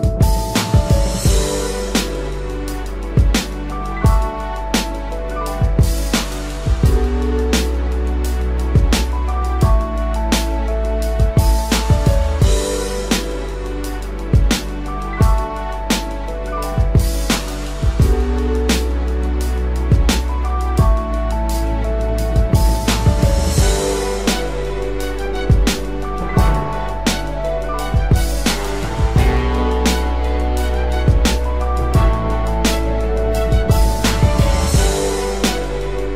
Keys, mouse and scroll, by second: 7.3 Return, 34.9 ctrl+t, 35.9 alt+shift+click.